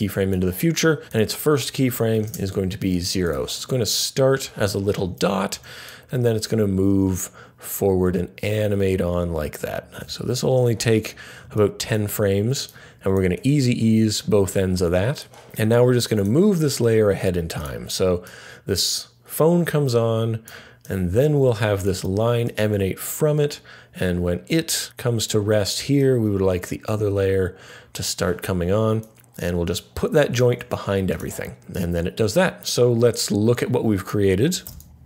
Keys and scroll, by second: 2.1 0, 10.0 Page_Down, 13.3 F9, 15.2 F3, 15.3 typing, 34.7 n.